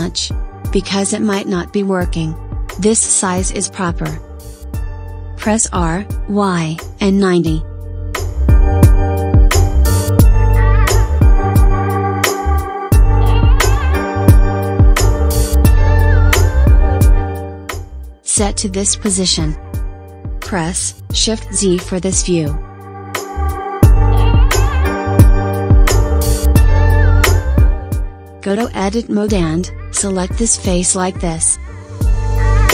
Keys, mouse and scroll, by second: 6.4 r, 9.4 g, 14.5 g, 21.2 shift+z, 21.9-22.6 scroll up 3, 22.6-23.5 scroll down 2, 23.5 scroll down 1, 23.6-24.7 middle drag, 24.7-25.4 scroll up 3, 25.4-28.4 shift+middle drag, 30.8 click, 31.9 drag.